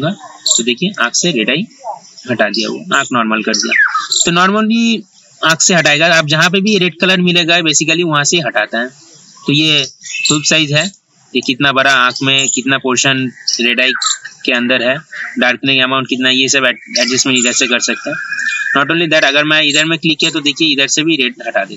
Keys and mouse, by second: 10.7-21.7 drag.